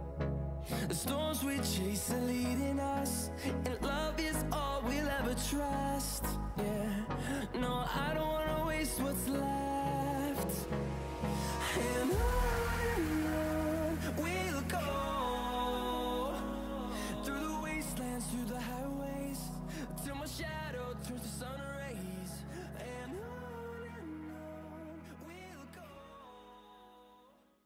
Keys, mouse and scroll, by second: 2.9 click, 8.0 scroll up 1.